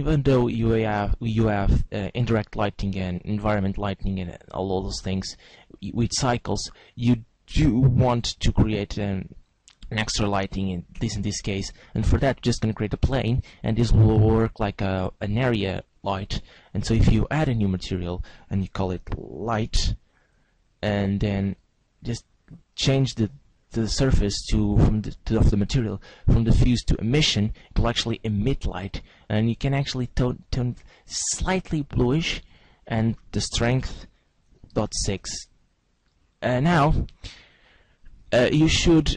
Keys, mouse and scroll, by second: 1.9 shift+a, 6.3 click, 8.2 s, 12.1 click, 16.9 click, 17.7 click, 21.5 click, 24.4 click, 28.0 click, 32.4 click, 35.1 ctrl+s, 35.9 click.